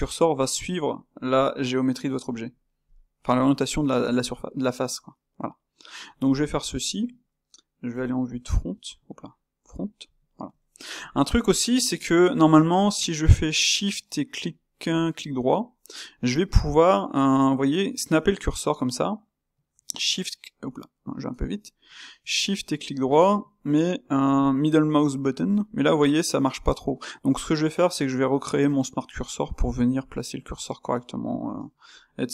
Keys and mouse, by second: 2.6-5.7 shift+middle drag, 5.7 shift+right click, 6.8 KP_3, 9.5 KP_1, 10.2-15.0 ctrl+shift+middle drag, 15.0-18.0 shift+right drag, 22.3-25.2 shift+right drag, 32.0-32.3 middle drag.